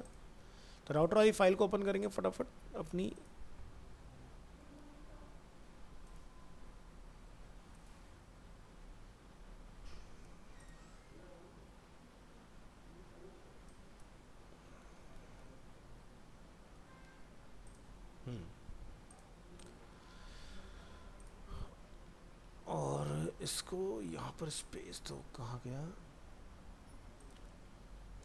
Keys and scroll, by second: 17.0 ctrl+s, 22.0 alt+Tab, 28.0 ctrl+s.